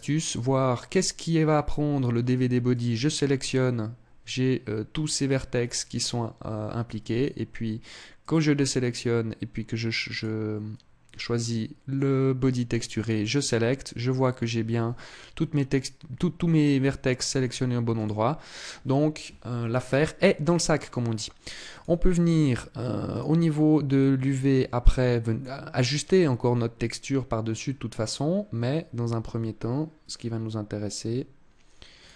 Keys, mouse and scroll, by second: 2.4 click, 8.0 click, 9.9 click, 12.7 click, 17.7 click, 21.4 click, 25.2 click, 31.7 click.